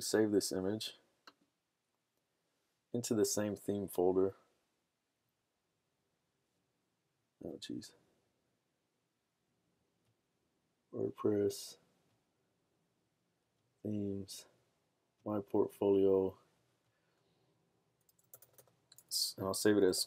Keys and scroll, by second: 17.9-20.0 typing.